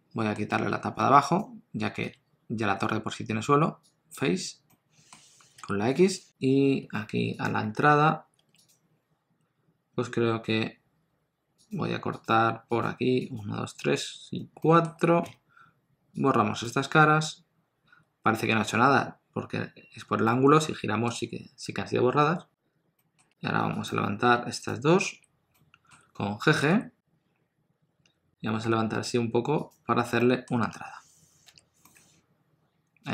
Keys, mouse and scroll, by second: 0.5 Tab, 1.0 3, 1.2 click, 2.0 x, 4.7 middle click, 5.6 KP_1, 6.9 2, 7.4 alt+click, 8.4 3, 8.7 click, 12.1 shift+click, 14.6 shift+middle click, 15.2 x, 20.3 middle click, 23.0 middle click, 23.3 2, 23.8 click, 24.6 shift+click, 25.5 middle click, 26.6 g, 29.9 scroll down 1, 30.2 middle click, 30.6 Tab, 31.8 middle click.